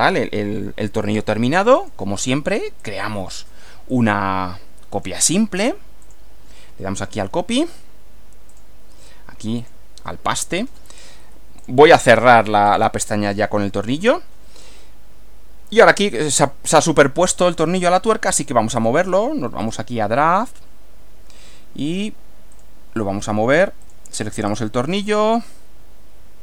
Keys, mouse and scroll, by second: 1.8 click, 2.8 click, 3.9 click, 4.9 click, 6.1 click, 7.0 click, 8.6 click, 9.7 click, 11.7 click, 12.7 click, 13.8 click, 14.8-16.2 middle drag, 17.4 middle click, 18.8 click, 19.6 click, 22.5 click, 23.8 click, 24.5 click.